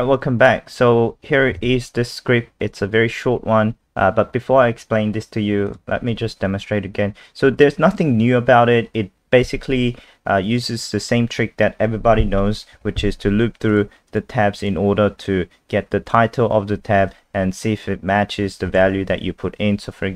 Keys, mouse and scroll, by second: 1.6 super+2, 5.7 click, 14.1 click, 14.6 click, 18.7 KP_0.